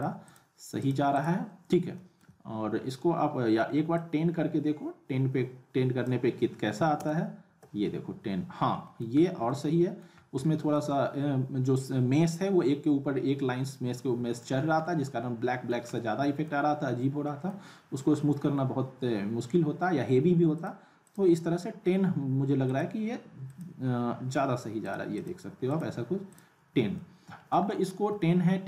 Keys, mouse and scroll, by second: 2.0 alt+middle click, 3.9-6.2 drag, 8.9 middle click, 9.2 scroll up 1, 9.5-10.1 alt+middle click, 10.2 scroll down 1, 10.4-11.4 alt+middle drag, 11.4-12.2 scroll up 2, 12.2-13.0 scroll up 1, 13.0 scroll up 1, 13.7-14.7 alt+middle click, 14.6 scroll down 2, 14.8-15.7 alt+middle drag, 20.5 click, 26.9-27.6 alt+middle drag.